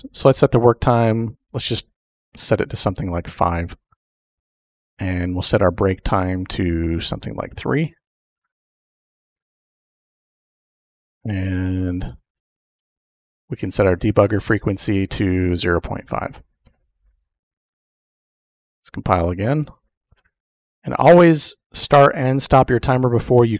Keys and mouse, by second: 0.1 click, 1.4-4.2 drag, 5.2 click, 5.9-8.2 drag, 13.1 click, 14.1-17.3 drag, 18.7 click.